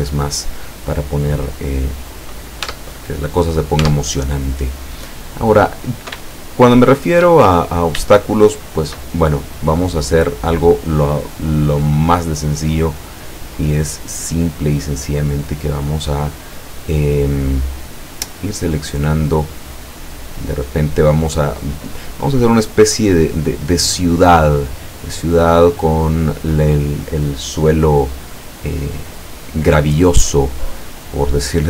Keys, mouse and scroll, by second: 2.7 Tab, 4.4 Tab, 5.0-6.3 middle drag, 6.5-7.4 shift+middle drag, 7.5 shift+middle click, 11.3 click, 13.1-13.8 scroll up 1, 14.1-14.6 scroll down 1, 14.7-18.0 middle drag, 18.7 right click, 19.7-20.0 scroll down 1, 20.3-21.2 middle drag.